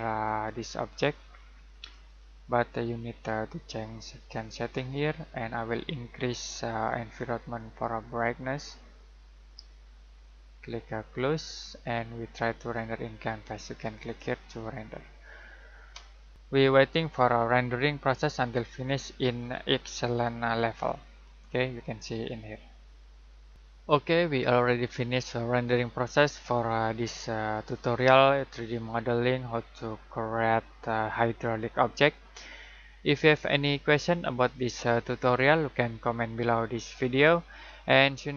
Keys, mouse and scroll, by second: 0.2 middle click, 1.9 click, 7.5 click, 14.0 click.